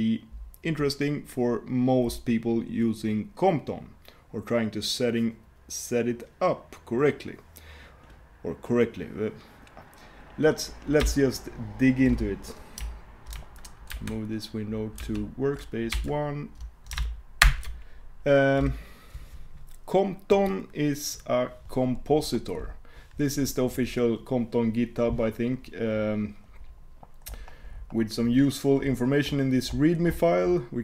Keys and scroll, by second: 14.0 shift+super+2, 15.0 shift+super+1, 16.2 super+1, 17.5 alt+super+Return.